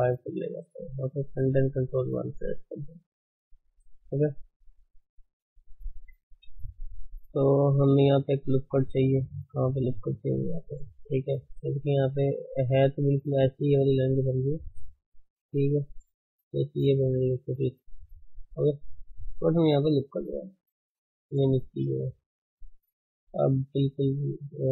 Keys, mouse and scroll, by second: 0.2 scroll down 4, 0.5-1.5 middle drag, 1.5 ctrl+1, 2.5 right click, 2.8-3.3 middle drag, 3.3-3.6 drag, 3.6-4.1 scroll down 2, 3.7 middle drag, 4.1-6.1 shift+middle drag, 6.1 KP_1, 6.4-7.0 scroll up 5, 7.0-7.9 middle drag, 7.9 Tab, 9.8 click, 10.0-13.7 middle drag, 13.7 scroll up 2, 14.2-15.5 shift+middle drag, 15.5 click, 15.8 d, 16.9 click, 17.3 d, 18.0-20.0 right drag, 20.0 ctrl+r.